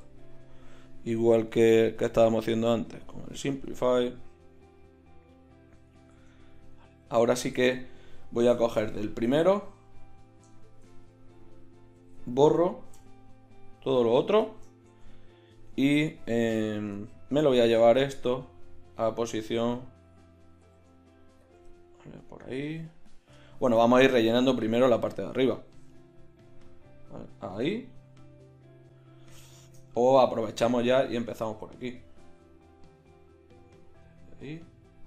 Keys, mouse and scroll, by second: 0.0 z, 4.3-5.3 right drag, 6.2 Tab, 7.0 z, 8.2 middle click, 8.3-8.8 scroll up 2, 8.4 click, 10.2-12.0 drag, 12.0 ctrl+i, 12.9 x, 14.9 Tab, 15.6 Tab, 17.0 a, 20.6 g, 21.6 click, 21.7-22.8 middle drag, 23.0 middle click, 23.9 middle click, 24.1 middle click, 25.7 g, 27.6 middle click, 27.8 middle click, 28.0 middle click, 31.2 g, 34.2 middle click.